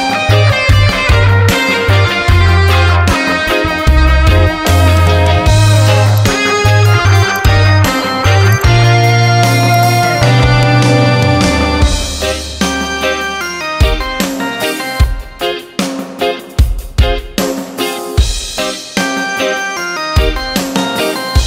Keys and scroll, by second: 0.9 ctrl+t, 4.4 Return.